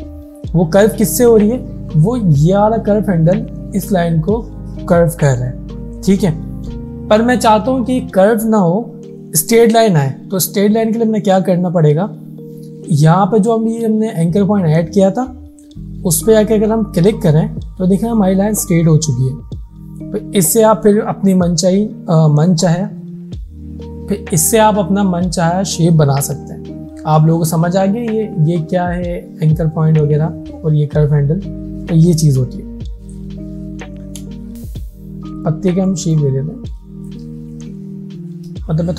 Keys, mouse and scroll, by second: 17.1 click, 34.5 click, 35.4 click, 35.8 space, 35.9 click, 36.8 Left, 37.1-38.9 shift+drag.